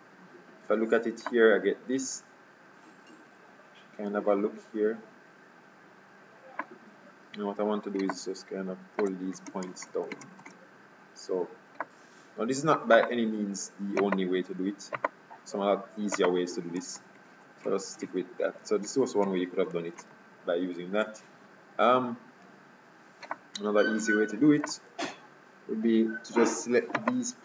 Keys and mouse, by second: 1.4-3.1 drag, 8.2-10.3 middle drag, 10.3 ctrl+Tab, 14.1-17.8 right drag, 17.1-17.4 ctrl+z, 17.8 ctrl+z, 18.1 ctrl+z, 18.5 ctrl+z, 19.0 ctrl+z, 19.4 ctrl+z, 19.9 ctrl+z, 21.1 KP_3, 25.2 KP_3, 27.1-27.4 right drag.